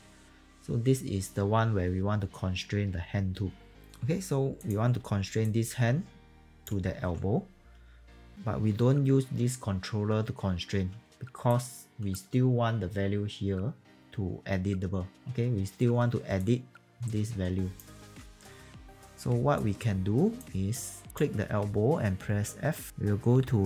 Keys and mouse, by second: 4.9 w, 5.3 click, 6.9 ctrl+z, 10.8 e, 11.4 click, 15.9 e, 16.3 click, 17.9 ctrl+z, 19.5 click, 20.4 w, 21.0 click.